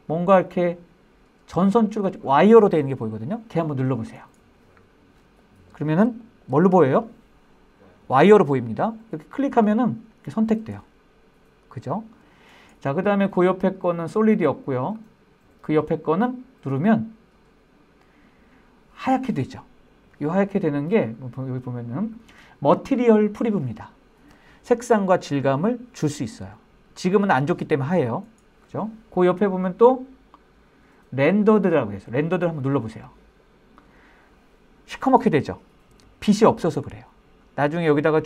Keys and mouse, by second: 4.5-5.7 drag, 5.7-6.1 middle drag, 6.5 shift+middle drag, 6.9-7.2 middle drag, 15.2 click, 18.1-28.7 drag, 33.6 click.